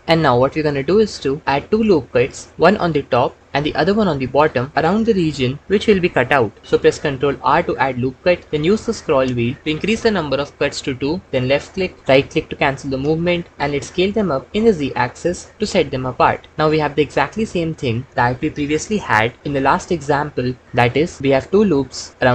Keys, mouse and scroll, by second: 1.0 KP_3, 7.4 ctrl+r, 12.8 click, 14.0 s, 16.1-22.1 drag.